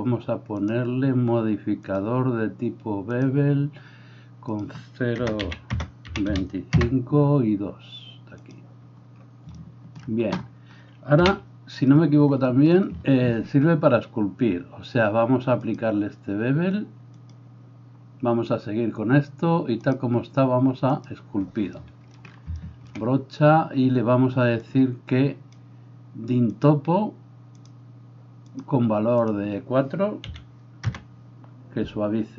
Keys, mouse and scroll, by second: 0.7-2.0 middle drag, 2.0-32.3 drag, 11.3 KP_4, 11.3 KP_1.